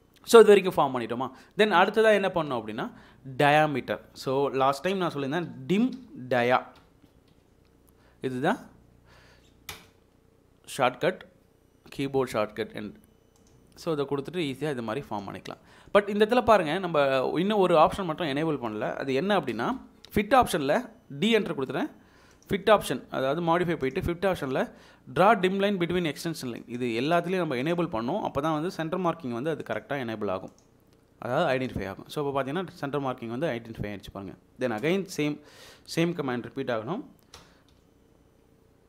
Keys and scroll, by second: 4.6-7.3 typing, 9.7 Return, 19.4 d, 19.7 space, 34.8 space, 37.3 Escape, 37.7-38.2 typing.